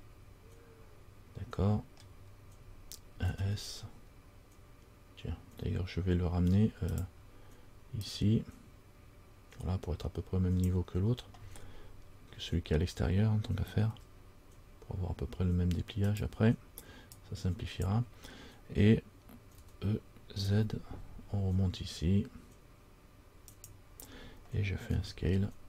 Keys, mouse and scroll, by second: 8.2 click, 17.3 click, 19.8 e.